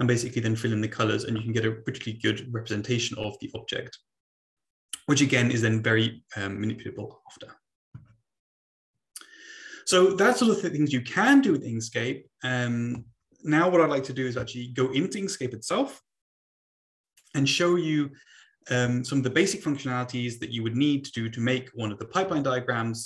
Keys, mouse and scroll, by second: 12.9 Right, 22.2 BackSpace, 22.3 BackSpace, 22.6 BackSpace.